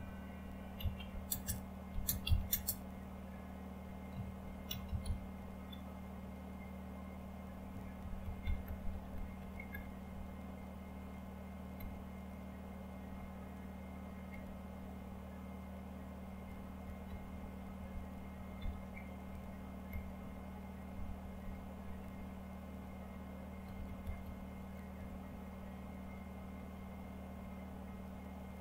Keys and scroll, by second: 0.0-2.9 typing, 4.1-5.5 typing, 7.4-8.9 typing, 9.4 Down, 11.5-16.8 typing, 17.0 Down, 17.5 Down, 18.6 Down, 19.3 Down, 20.9 Down, 22.0 Down, 23.3-25.4 typing.